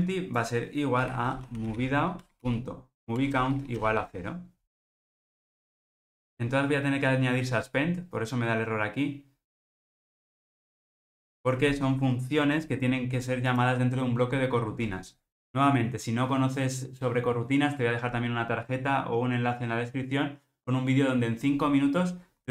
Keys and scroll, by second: 2.2 Return.